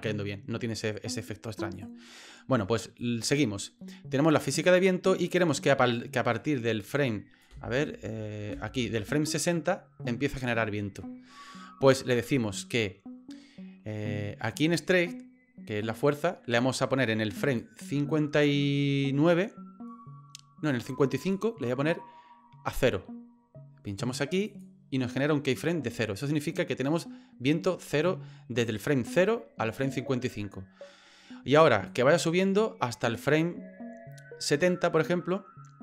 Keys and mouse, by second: 1.8 click, 3.0-4.3 drag, 5.4-7.4 drag, 7.5 space, 8.5 space, 9.3 click, 17.6-21.3 drag, 24.5 click, 31.9-34.6 drag.